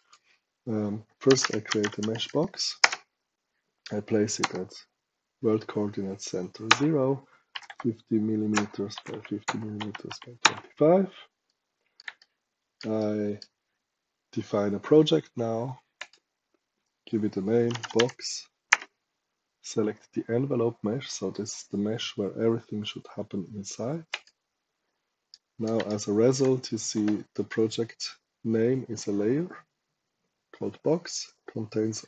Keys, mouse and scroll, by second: 1.1-2.4 typing, 2.7 Return, 4.3 KP_0, 6.6 Return, 7.4 KP_5, 7.5 KP_0, 7.8 KP_5, 8.4 Return, 8.8 KP_5, 8.9 KP_0, 9.4 Return, 9.7 KP_2, 10.0 KP_5, 10.3 Return, 11.4 right click, 12.1 shift+right click, 15.9 click, 17.4-18.4 typing, 18.6 Return, 24.0 click, 25.2 right click, 25.8 shift+right click.